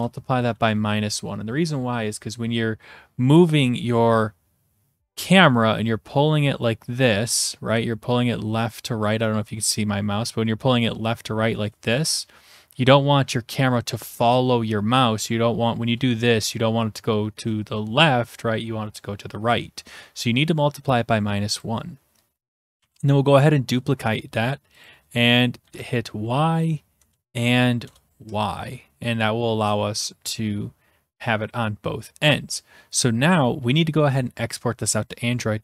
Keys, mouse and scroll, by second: 0.6 typing, 20.8-21.3 scroll up 1, 21.3 scroll up 1, 21.5 scroll, 21.7 click, 22.8 ctrl+d, 24.8-25.9 drag, 25.7-27.1 Delete, 25.7 typing, 26.0-26.9 Right, 27.3 Delete, 27.9 BackSpace, 29.3 click, 30.3 scroll down 5, 33.0 click.